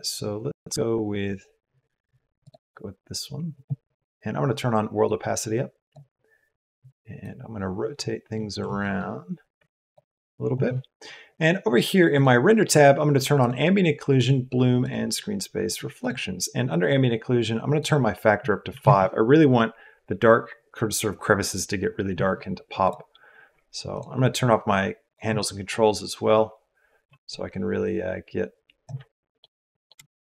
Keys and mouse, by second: 17.7-18.8 drag, 22.8 click, 23.9 click, 25.0-28.9 drag, 29.3 middle click, 30.0 shift+click.